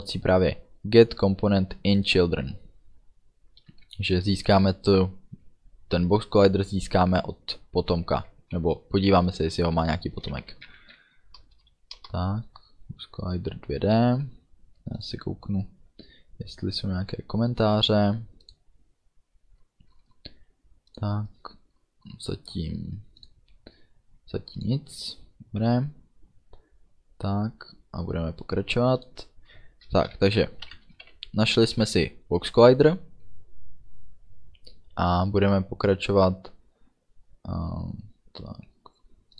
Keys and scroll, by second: 3.9 shift+,, 10.5 shift+b, 10.7 o, 10.9 x, 11.9 Down, 12.0 Return, 30.1 shift+9, 30.7 Right, 31.1 ů, 31.7 ctrl+s.